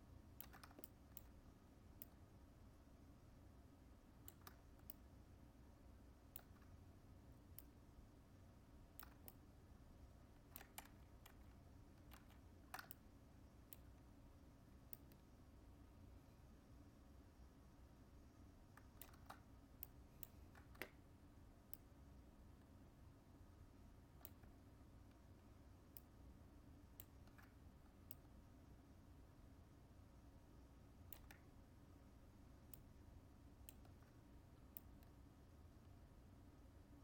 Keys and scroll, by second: 10.7 ctrl+z.